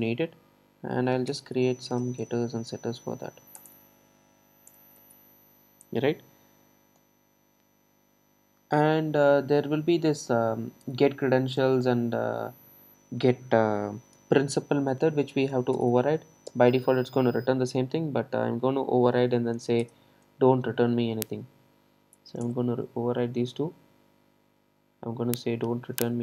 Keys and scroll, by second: 2.2 super+n, 16.7 super+n.